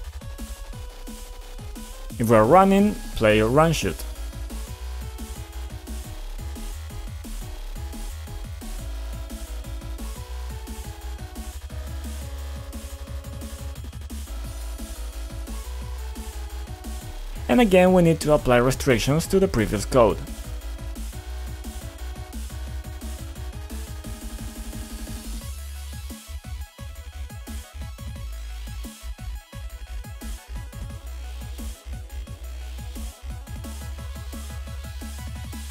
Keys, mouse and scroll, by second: 2.0 click, 2.2 click, 2.3 ctrl+click, 3.2 click, 3.4 double click, 4.5-6.4 typing, 6.5 Return, 7.7 click, 8.8-9.7 typing, 9.8 Down, 10.1 Return, 10.4 Return, 11.4 F5, 12.9 click, 13.3-16.5 typing, 16.8 alt+Tab, 17.2 scroll up 2, 17.7 middle click, 18.7-19.1 scroll up 2, 19.4 middle click, 21.0 click, 21.7 click, 22.9 click, 23.6 b, 24.2 click, 24.6 ctrl+click, 25.2 click, 25.4 double click, 26.1 double click, 26.8-28.4 typing, 28.4 Return, 29.6 click, 30.8 F5, 32.2 click, 33.3-35.7 typing.